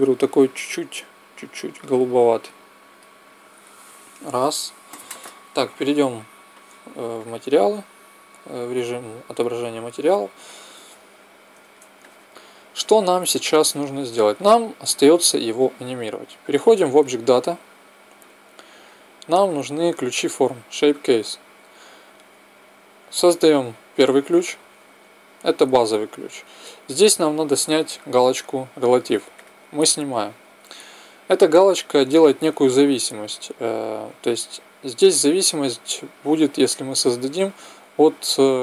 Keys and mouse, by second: 5.8-7.6 drag, 11.1-16.9 middle drag, 16.9-37.0 drag.